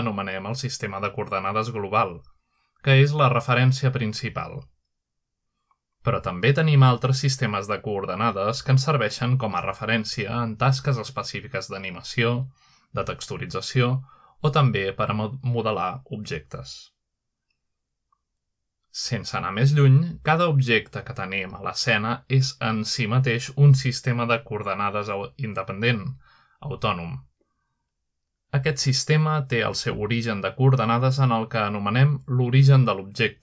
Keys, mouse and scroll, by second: 0.6-3.0 middle drag, 5.9 click, 6.4 click, 7.2 click, 9.1 click, 10.5 click, 12.5 click, 14.2-17.2 shift+middle drag, 21.8 middle click, 22.7 shift+middle drag, 23.2-24.1 shift+middle drag, 25.9 <, 27.1 z, 28.2 click, 28.9-29.3 shift+middle drag, 29.9-30.5 middle drag, 30.9 click.